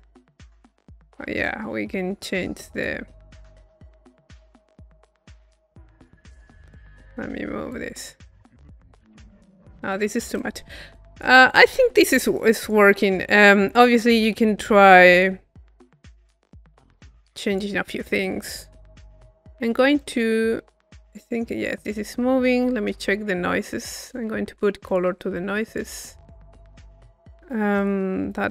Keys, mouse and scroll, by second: 1.4-3.6 drag, 4.4-7.1 drag, 7.2-10.3 drag, 10.6 middle click, 11.0-13.4 drag, 13.5 click, 14.1 middle click, 15.0 click, 16.3-18.9 drag, 18.9 middle click, 20.0 click, 20.9 click, 21.6 click, 22.1-24.0 middle drag, 24.0-25.5 drag, 25.7 click, 26.4 click, 27.8 click.